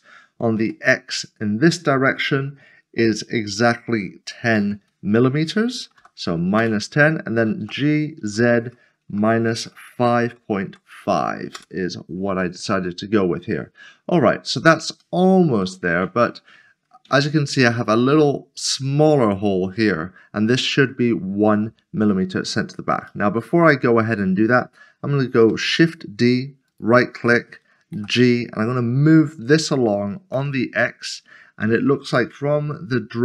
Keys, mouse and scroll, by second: 0.6 typing, 4.4 typing, 6.0 typing, 6.6 Return, 7.6 typing, 9.2-10.2 typing, 11.5 Return, 12.9 middle click, 15.9 middle click, 23.1 middle click, 25.5 typing, 26.7 right click, 28.2 typing, 30.4 typing.